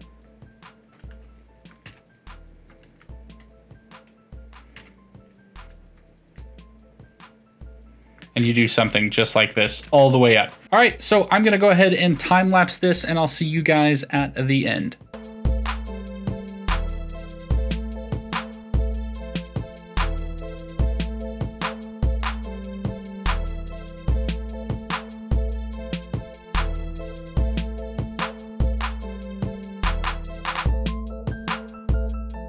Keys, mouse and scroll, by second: 1.1-1.8 middle drag, 1.8 g, 3.0-4.8 middle drag, 4.8 g, 5.9-8.4 middle drag, 8.4 g, 9.5-10.9 middle drag, 10.9-11.4 scroll down 1, 11.4-12.7 scroll down 3, 12.7-14.5 scroll down 1, 15.5 click, 16.0 Tab, 16.7 click, 16.9 click, 17.5 middle click, 17.9-21.0 typing, 18.0 middle click, 18.7 middle click, 19.1 middle click, 19.7 middle drag, 20.2 middle click, 20.7 middle click, 21.2-22.0 middle drag, 22.0 e, 22.4-22.7 shift+middle drag, 22.7 e, 23.0 middle click, 23.3 g, 23.6 middle click, 23.9 e, 24.3 shift+middle click, 25.0 g, 25.7 ctrl+z, 26.0 e, 26.3 middle drag, 26.6 g, 26.8 middle click, 27.0 g, 27.3-28.1 middle drag, 28.1 e, 29.1 middle drag, 29.3 click, 29.6 middle click, 29.8-32.0 typing, 30.1 click, 30.4 middle click, 31.3 ctrl+z, 31.5 middle click.